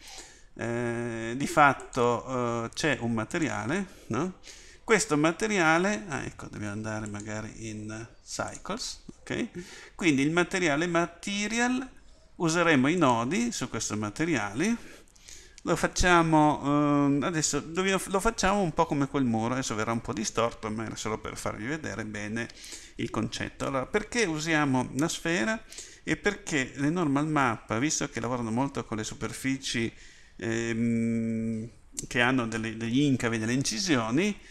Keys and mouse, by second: 7.1-9.2 drag, 12.9-17.5 drag.